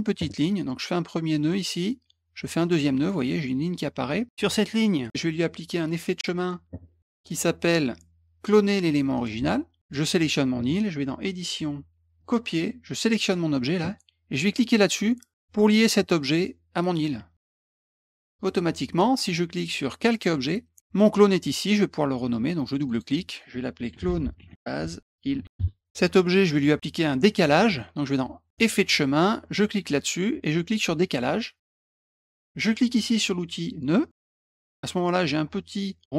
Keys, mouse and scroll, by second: 1.4 click, 2.6 click, 4.9 click, 6.0 click, 6.2 click, 7.3 click, 9.1 click, 9.8 click, 11.3 click, 12.1 click, 13.2 click, 17.6 click, 20.0 click, 22.8 click, 22.9 click, 23.6-25.9 typing, 28.5 click, 29.5 click, 31.0 click, 34.0 click.